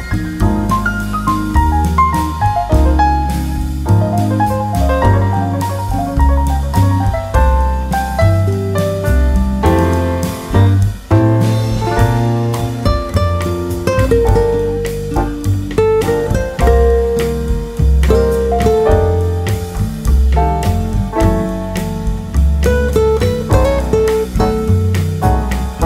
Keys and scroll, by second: 0.6 Right, 2.8 Right, 6.1 Right, 8.0 Left.